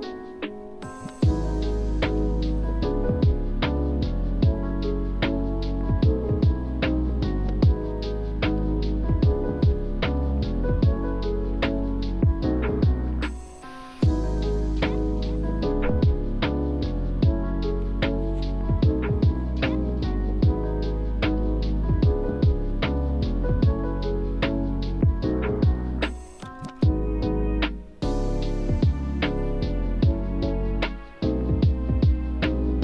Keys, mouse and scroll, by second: 3.4-6.7 scroll up 1, 6.7 click, 7.7 1, 8.5 Return, 9.9 click, 10.4 scroll down 1, 11.0 alt+middle click, 11.5 alt+scroll up 1, 12.4-14.8 drag, 15.4 typing, 16.1 Return, 17.1 click, 17.6-18.3 scroll up 1, 19.0 alt+middle click, 19.3 alt+scroll up 1, 19.7-21.7 alt+drag, 22.0 3, 22.1 Return, 22.6 click, 23.5 5, 23.6 Return, 24.1 scroll down 1, 24.9 alt+middle click, 25.0 alt+scroll up 1, 25.3 alt+middle click, 25.5 click, 26.0-27.3 shift+drag, 27.3 shift+click, 29.5 5, 29.6 Return, 29.8 click, 29.9 scroll down 1, 30.1 alt+middle click, 30.2 alt+scroll up 1, 30.4 alt+middle click, 30.9 click, 31.6 shift+click.